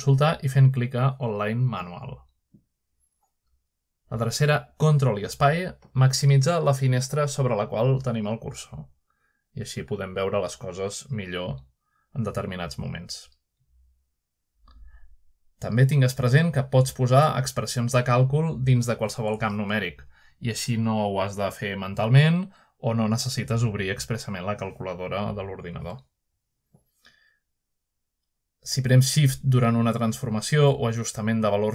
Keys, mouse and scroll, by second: 0.0 right click, 4.1-6.2 right drag, 9.4 ctrl+space, 11.8-12.4 shift+scroll up 1, 12.0-14.1 ctrl+shift+middle drag, 12.4-17.3 ctrl+space, 14.1-14.4 shift+scroll up 1, 14.4 shift+middle click, 14.6-15.6 shift+scroll down 1, 15.7-17.3 shift+middle drag, 15.9-17.3 scroll up 1, 18.8 ctrl+space, 20.5-21.5 middle drag, 20.5 scroll up 1, 20.6-21.2 scroll down 1, 24.0 click, 29.0 3.